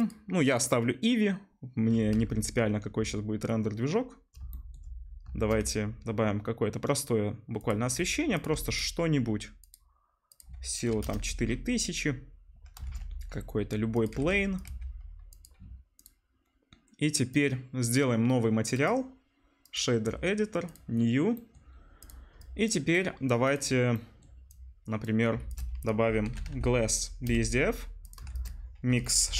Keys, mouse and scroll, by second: 0.1 click, 0.4-5.4 middle drag, 2.1 z, 5.3 shift+a, 7.9 r, 8.4-9.6 drag, 8.5 g, 12.8 shift+a, 14.1 g, 14.6 click, 14.6 s, 14.7 right click, 15.3 click, 16.0-17.4 drag, 17.7-23.9 middle drag, 24.5-28.1 middle drag, 25.4 shift+a.